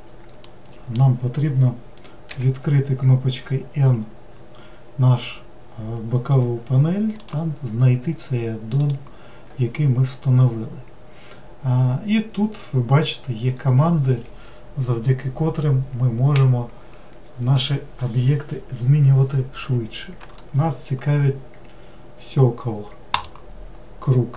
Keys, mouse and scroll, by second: 0.5-2.3 middle drag, 2.3 n, 7.2 click, 8.8 click, 23.2 click.